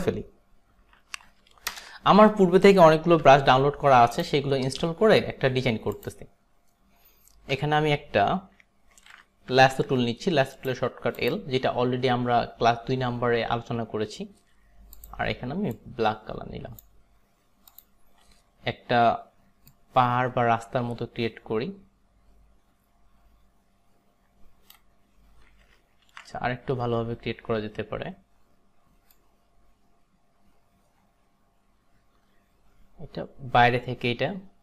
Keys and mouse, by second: 1.8 ctrl+BackSpace, 3.2 v, 6.0 click, 7.6 b, 9.5 l, 10.6 right click, 11.3 click, 15.0 click, 15.8 click, 17.8 click, 19.8 click, 26.2 ctrl+d, 29.2 click.